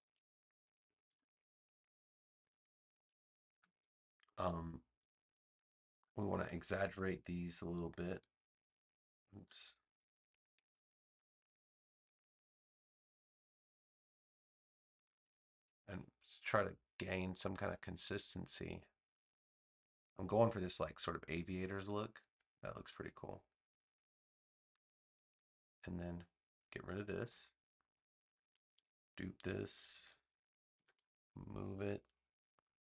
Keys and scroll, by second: 1.0 BackSpace, 6.1 a, 27.1 BackSpace, 29.9 super+j, 30.7 v.